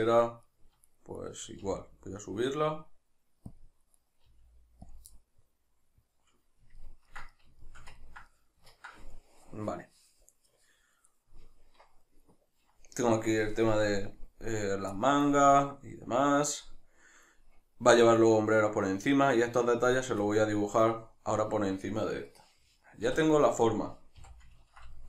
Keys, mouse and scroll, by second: 0.5 right click, 0.9 shift+right click, 1.2 shift+right click, 1.6 g, 3.6 click, 4.0 right click, 4.2 g, 4.9 click, 5.1-8.0 middle drag, 20.4 middle click, 23.1 KP_Divide, 24.2 a, 24.6 ctrl+middle click.